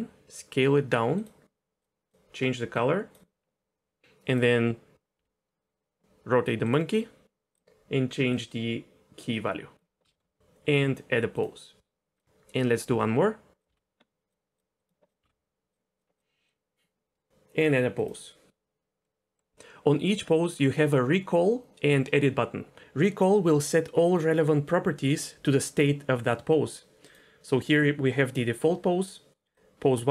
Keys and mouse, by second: 2.1 click, 4.3 click, 5.2 r, 6.6 click, 7.5 click, 8.4-9.7 drag, 10.1 shift+middle click, 11.3 click, 12.1 click, 12.8 g, 13.7 alt+s, 14.3 click, 15.2 r, 16.0 click, 16.0 r, 16.1 click, 16.5 click, 18.0 click, 19.0 middle click, 27.1 click.